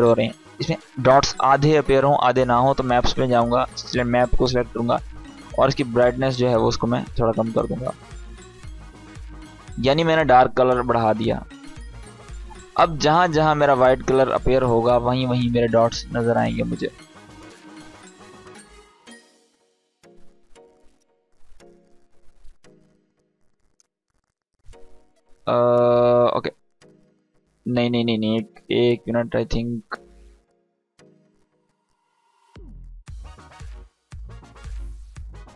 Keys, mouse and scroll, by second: 1.7-7.0 drag, 18.6 space, 21.1 click, 25.2-25.8 drag, 29.0 space, 32.3 space, 32.8 click, 33.1 space.